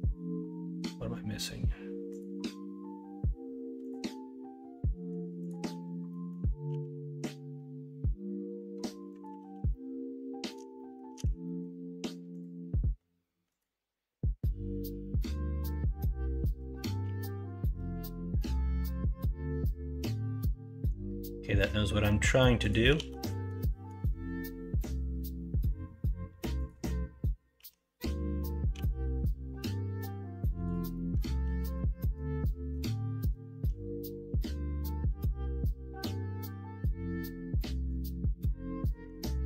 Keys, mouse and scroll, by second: 6.0 middle click, 6.7 g, 9.4 ctrl+z, 9.7 middle click, 10.7 middle click, 11.4 middle click, 12.4-16.6 drag, 16.6 middle click, 17.0 g, 22.9 ctrl+z, 26.0-27.5 drag, 27.5 f, 28.7 g, 30.9 middle click, 31.4 ctrl+z, 31.7 middle click, 32.4 middle click, 33.3-36.1 middle drag.